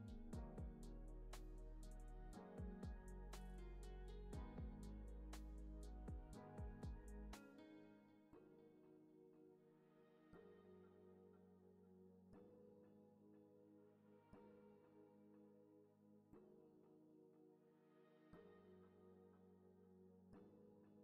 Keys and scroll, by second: 3.4 p, 11.2 p, 14.5 Left.